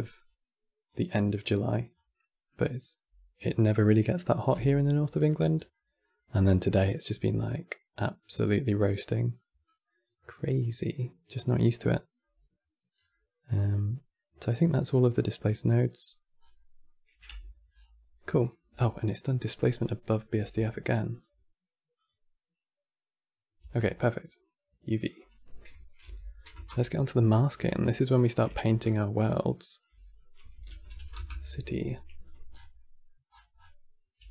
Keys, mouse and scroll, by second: 1.6-2.1 scroll up 3, 2.1-3.3 middle drag, 3.3 click, 4.2 g, 5.3 scroll down 2, 5.4-7.9 middle drag, 7.9 click, 9.3 scroll down 3, 9.5-12.6 middle drag, 12.6 scroll down 4, 12.8-14.5 middle drag, 14.5-14.9 scroll up 7, 15.6 middle click, 16.1 scroll down 5, 16.2-17.0 middle drag, 17.0 Tab, 17.4 scroll up 12, 18.4 Tab, 20.1 n, 20.8 click, 21.7-23.3 drag, 23.3 Tab, 23.8-24.3 scroll down 5, 24.6 click, 24.8-27.2 drag, 27.4 n, 27.8-28.2 scroll down 5, 28.2 Tab, 28.5-28.9 scroll down 5, 28.9-29.5 scroll up 13, 29.5-32.0 drag, 32.2 scroll down 8, 32.5 middle click, 32.9 scroll up 1, 33.1-33.6 scroll down 9, 33.9 g.